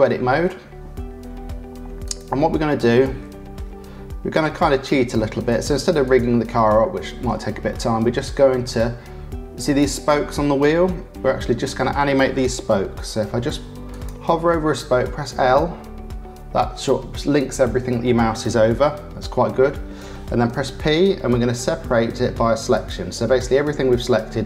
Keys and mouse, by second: 0.9 Tab, 2.0 click, 2.7 click, 2.9-4.2 middle drag, 4.2 3, 5.5 middle click, 6.0 middle click, 6.7 shift+middle click, 7.7 middle click, 8.5 click, 9.6 click, 13.9 click, 14.9 l, 20.5 p.